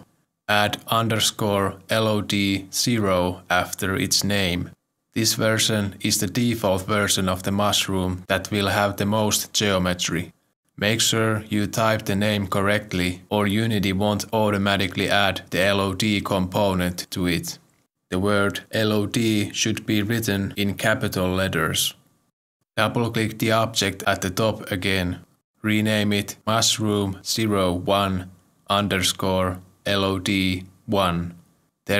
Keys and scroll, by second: 0.0 Right, 0.9-3.7 typing, 22.0 Return, 26.4 Return, 26.4 ctrl+Right, 27.1 BackSpace, 28.4-30.7 typing.